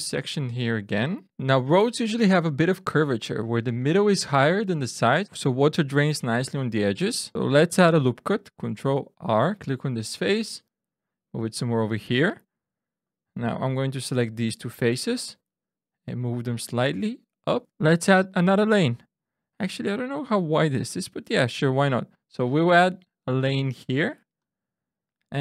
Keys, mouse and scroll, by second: 1.3 click, 3.7 shift+click, 8.7 ctrl+r, 11.0 click, 12.5 3, 13.0 click, 13.9 shift+click, 15.1 click, 20.8 ctrl+r, 24.3 click, 25.3 ctrl+r.